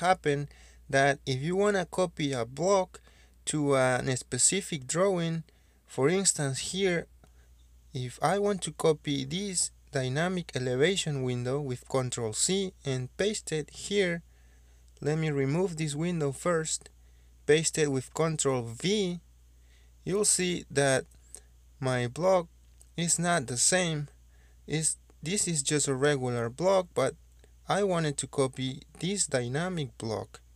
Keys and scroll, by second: 5.7 ctrl+c, 16.5 Delete, 19.0 ctrl+v, 29.3 ctrl+z.